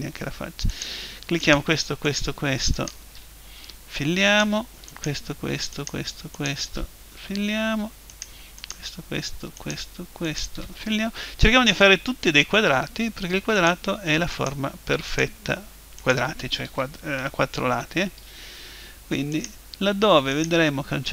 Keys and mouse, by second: 0.7-8.0 right drag, 3.6 f, 7.2 f, 8.0 middle click, 8.1-11.8 right drag, 11.1 f, 11.8-13.6 middle drag, 13.6-17.7 right drag, 17.7-19.3 middle drag, 18.2 f, 19.3-21.1 right drag.